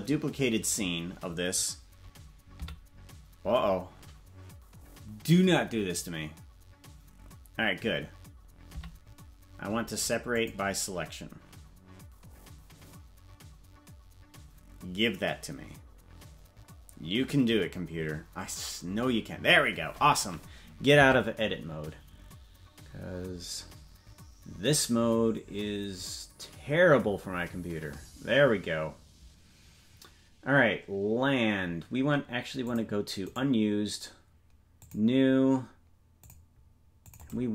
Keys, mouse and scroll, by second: 36.2-37.5 drag, 36.2 right click.